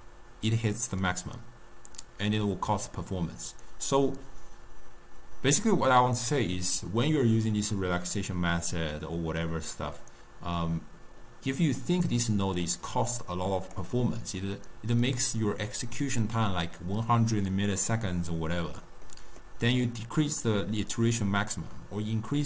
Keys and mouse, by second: 11.9-12.7 middle drag, 12.7-14.5 drag, 14.5-17.6 middle drag, 19.2-22.3 middle drag.